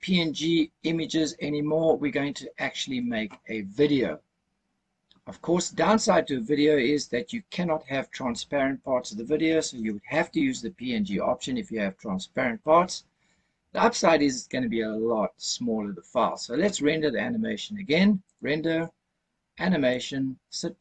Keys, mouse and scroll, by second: 18.2-20.3 drag.